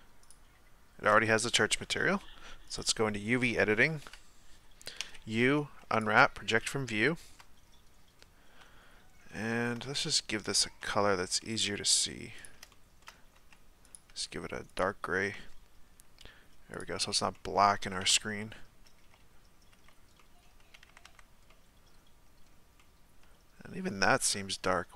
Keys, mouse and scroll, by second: 0.2 click, 2.7 click, 4.1 KP_1, 4.9 u, 6.7-7.0 scroll down 2, 7.0-8.6 shift+middle drag, 8.6 a, 10.8 s, 11.7 g, 12.7-13.3 shift+middle drag, 13.3 s, 14.1 g, 16.8 click, 17.3-18.1 middle drag, 18.1 KP_1, 19.1 z, 19.7 z, 20.2-20.9 middle drag, 20.9 a, 21.0 a, 21.5-24.9 middle drag.